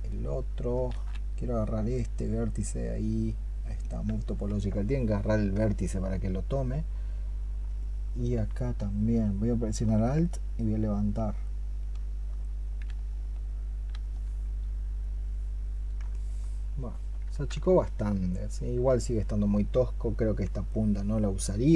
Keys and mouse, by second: 5.6 alt+click, 7.6 alt+click, 16.0 alt+click, 17.6 alt+click.